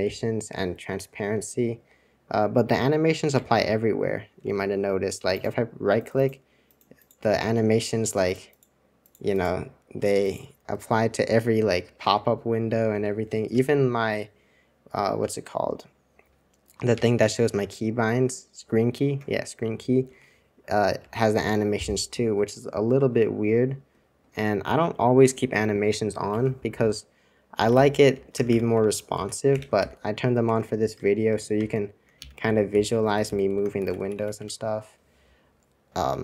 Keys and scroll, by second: 1.2 super+2, 3.3 super+1, 4.4 super+2, 12.1 super+1, 12.9 super+c, 13.1 super+c, 17.0 super+2, 20.2 super+1, 21.0 super+2, 26.4 super+1, 26.8 super+r, 27.5-29.9 typing, 30.4 Escape, 30.9 super+Return, 31.3 super+Return, 31.5 super+Return, 32.1 super+j, 32.4 super+j, 32.7 super+j, 33.0-33.7 typing, 33.8 super+c, 34.0 super+c, 34.1 super+c, 34.3 super+2.